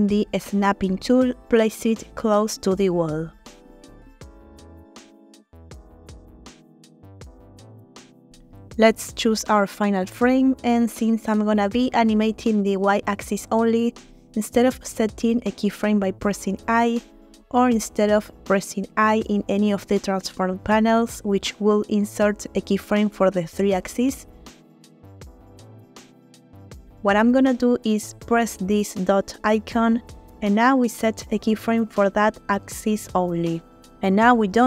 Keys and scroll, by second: 1.7 g, 7.0 g, 7.0 x, 11.7 g, 11.9 y, 13.3 Escape, 16.4 n, 19.4 ctrl+z, 20.5 n, 25.9 ctrl+z, 27.2 ctrl+z, 28.1 ctrl+z, 28.4 ctrl+z.